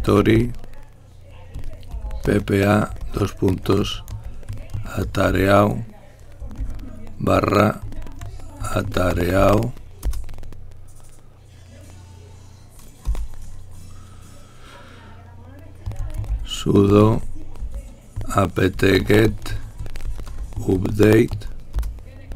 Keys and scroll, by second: 0.0-7.6 typing, 10.8 Return, 13.3-20.7 typing, 20.5 Return.